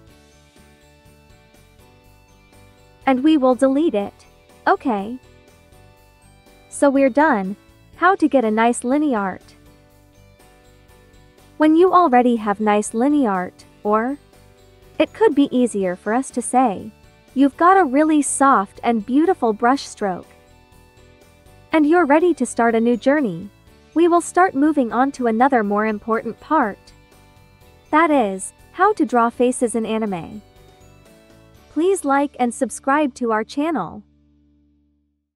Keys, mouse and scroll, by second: 0.0-1.8 shift+drag, 1.8-3.4 shift+drag, 3.4 d, 4.3 ctrl+d, 5.5 2, 6.0 space, 6.3 click, 6.7 space, 7.2 click, 8.1 b, 10.3 click, 11.3 b, 12.4-16.7 drag, 17.1 space, 17.3 click, 17.7 space.